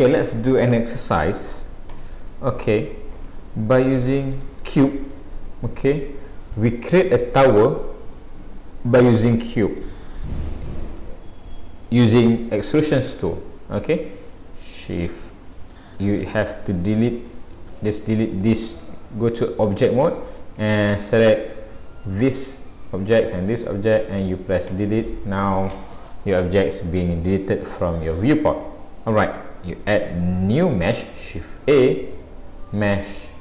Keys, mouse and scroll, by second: 0.6 scroll up 1, 1.9 Delete, 3.1 click, 4.0 Delete, 16.7 ctrl+z, 17.0 ctrl+z, 17.6 ctrl+z, 18.5 click, 20.6 click, 23.1 shift+click, 24.7 Delete, 27.4 scroll up 1, 28.2 shift+scroll up 1, 28.3 shift+middle click, 31.6 shift+a.